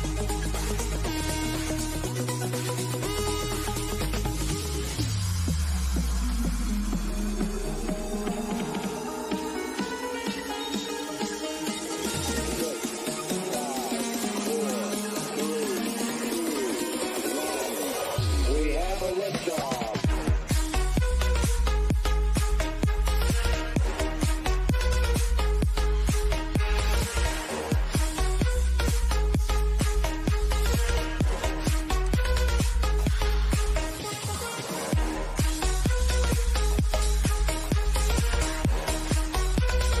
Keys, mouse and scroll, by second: 0.5-1.9 middle drag, 1.9 scroll down 1, 4.2 middle click, 5.5 click, 7.7 middle click, 10.2-12.1 middle drag, 12.1 scroll up 1, 13.5-16.2 middle drag, 16.2 click, 17.5-18.0 scroll down 1, 23.8 click, 27.5 click, 30.1 click, 33.7 scroll up 1, 34.7-37.3 middle drag, 37.3 click, 39.7-40.0 middle drag.